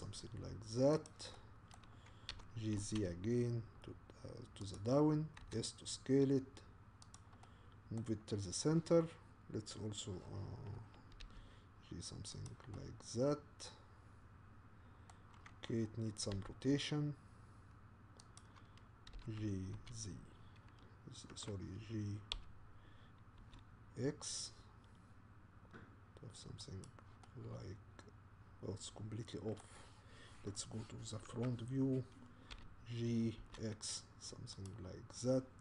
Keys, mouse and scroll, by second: 1.3-2.3 middle drag, 2.3 g, 5.4 s, 7.4-11.2 middle drag, 11.2 g, 12.7-16.3 middle drag, 16.3 r, 19.2 g, 22.3 g, 27.3-31.3 middle drag, 31.3 KP_1, 32.5 g.